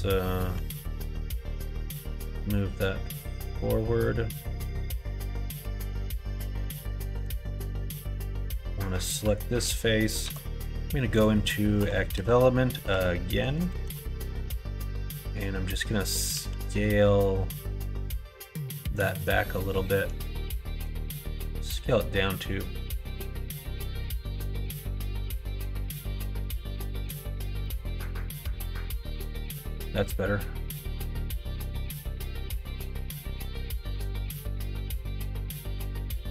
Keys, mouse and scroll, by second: 0.4 l, 1.7 g, 5.5 3, 6.4 middle click, 8.2 3, 9.2 click, 11.7-13.7 typing, 16.2 s, 20.7 s, 27.5 middle click, 28.3 middle click, 28.8 click, 29.2 middle click, 30.8-32.1 middle drag, 32.3 middle click, 32.8-33.9 middle drag, 34.4 middle click, 35.5 middle click, 35.9 shift+middle click.